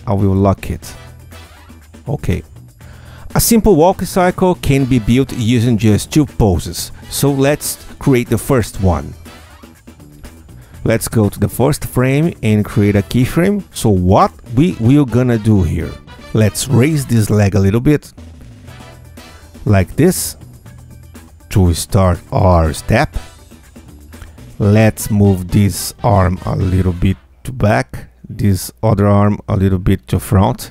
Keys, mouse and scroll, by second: 0.7 click, 1.4 Tab, 9.3-10.0 drag, 10.2 Tab, 10.7 ctrl+a, 11.8 F8, 13.7 ctrl+F2, 14.2 ctrl+Tab, 14.8-15.4 scroll up 3, 15.5-16.0 scroll down 4, 16.7 Tab, 17.3 click, 17.7 q, 18.6-22.5 alt+drag, 24.9-27.4 alt+drag, 27.9-29.1 alt+drag, 29.3-30.7 drag.